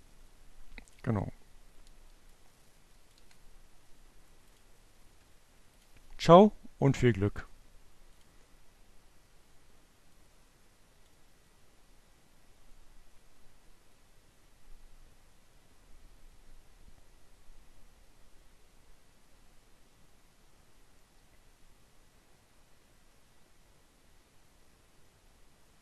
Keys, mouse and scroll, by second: 0.5 click, 1.9-2.9 drag, 2.8 Delete, 4.2 click, 5.0 click, 6.8 click, 9.3 click.